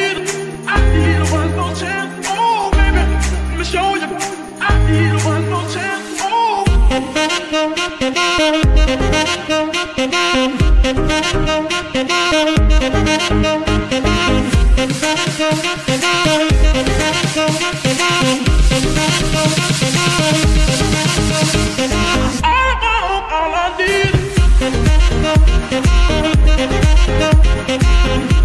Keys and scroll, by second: 1.0 g, 1.1 y, 2.2 Escape, 6.4 g, 6.6 y, 7.3 Escape, 8.0 g, 9.0 Escape, 10.0 g, 10.8 Escape, 11.8 g, 12.3 Escape, 15.1 shift+g, 15.2 shift+y, 18.3 Escape, 23.3 r, 24.1 Escape, 25.1 g, 25.3 y, 25.9 Escape.